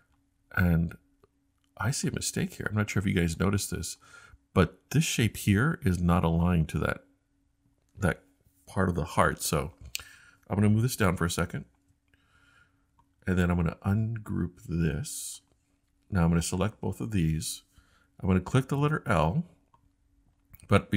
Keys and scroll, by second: 18.7 i, 19.7 |.